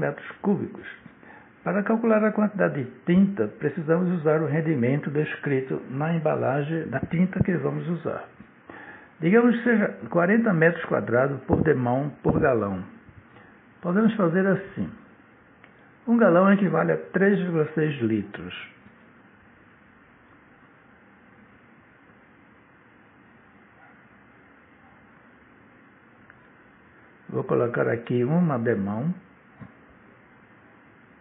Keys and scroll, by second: 9.5 shift+/, 18.7 3, 19.6 ,, 20.7 6, 24.2 l, 28.4 1, 30.9-31.2 typing.